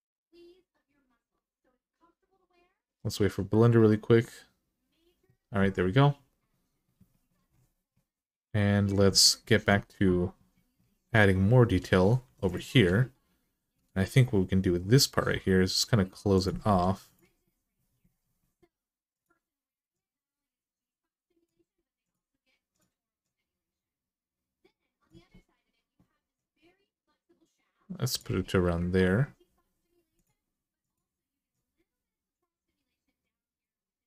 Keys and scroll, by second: 12.0 2, 15.1 e, 16.5 1.